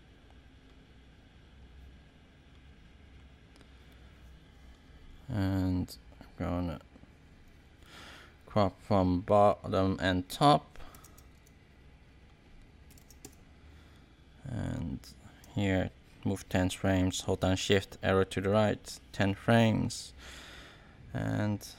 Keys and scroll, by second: 10.6-11.5 typing, 12.6-13.4 typing, 18.2 shift+Right.